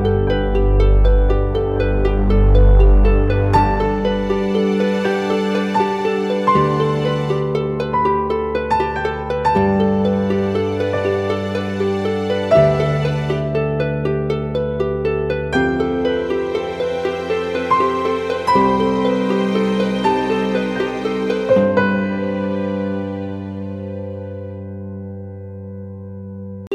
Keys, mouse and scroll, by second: 1.1-1.8 scroll up 1, 1.8 typing, 4.8 double click, 5.2-5.7 typing, 9.2-9.8 typing, 13.2 typing, 13.6 ctrl+t, 16.7 Return, 23.2 ctrl+t.